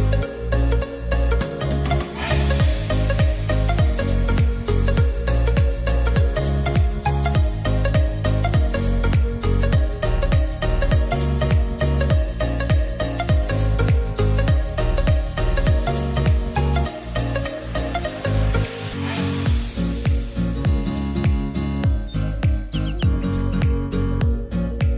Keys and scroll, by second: 0.8-2.0 typing, 8.4-9.7 typing, 15.4-17.3 typing.